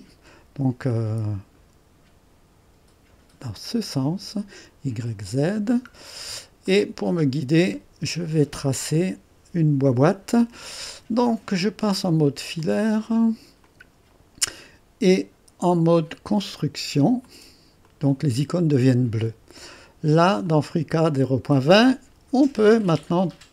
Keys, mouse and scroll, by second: 0.9-2.6 drag, 3.4-5.5 drag, 6.1-6.7 scroll up 1, 6.7 right click, 7.4-7.9 scroll up 2, 7.5 right click, 7.8 right click, 12.5 click, 13.6 click, 16.4 click, 17.2 click, 17.8 click, 20.4 click.